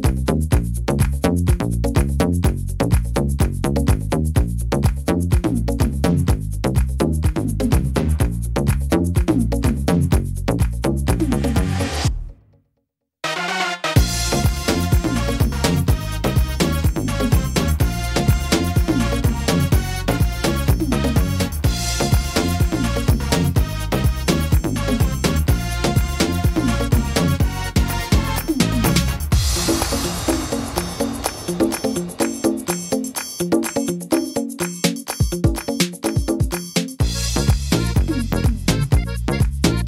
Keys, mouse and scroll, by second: 0.2 middle click, 0.7 shift+middle click, 1.4 middle click, 2.5 right click, 3.5 click, 4.4 middle click, 4.8-5.6 scroll down 6, 5.4 middle click, 7.1 middle click, 8.3 right click, 9.7 ctrl+r, 11.0 s, 12.6 click, 15.0 right click, 15.9 l, 16.8 s, 18.6 middle click, 19.4 shift+middle click, 19.8 middle click, 20.8 right click, 21.8 click, 22.8 middle click, 24.7 click, 24.7 right click, 26.2 middle click, 27.3 right click, 28.2 click, 29.7 click, 30.6 middle click, 32.2 click, 33.2 right click, 33.9 click, 35.0 middle click, 36.6 middle click, 36.6 scroll down 3, 37.4 right click, 38.0 right click, 38.2 middle click, 39.3 click.